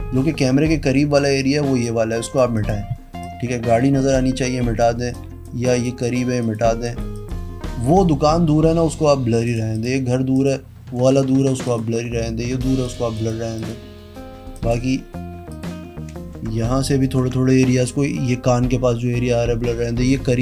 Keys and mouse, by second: 1.2 click, 2.5 click, 3.1 click, 5.1 click, 5.6 click, 6.0 click, 6.3 click, 6.8 click, 7.1 click, 9.4 click, 9.7 click, 10.3 click, 11.6 click, 12.8 click, 13.1 click, 13.5 click, 14.5 click, 15.4 click, 16.6 ctrl+z, 17.0 ctrl+z.